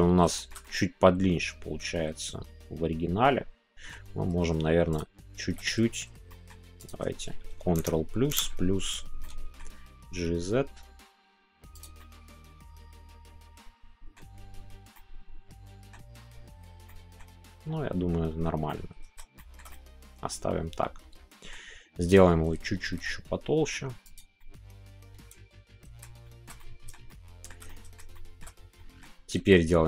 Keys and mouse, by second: 0.3-3.9 shift+middle drag, 4.9 alt+shift+click, 6.2 middle click, 6.8 click, 7.8 ctrl+KP_Add, 9.2 middle click, 10.0 g, 11.7 click, 11.9-14.1 middle drag, 14.9-15.9 middle drag, 16.8 middle click, 18.6 middle click, 19.3 shift+middle click, 19.7-21.5 middle drag, 24.0 click, 24.3-25.9 middle drag, 26.2 shift+middle click, 27.1 shift+middle click, 27.7 middle click, 28.1 shift+middle click, 28.7 middle click.